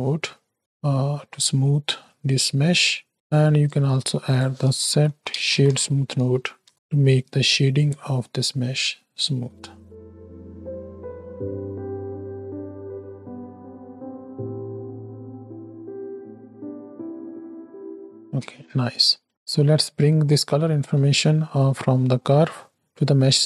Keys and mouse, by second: 1.2 middle click, 2.5 middle click, 3.3 click, 3.9 shift+a, 8.3 middle click, 8.9 space, 11.0-12.5 middle drag, 18.2 space, 19.5-20.4 right drag, 21.2 middle click.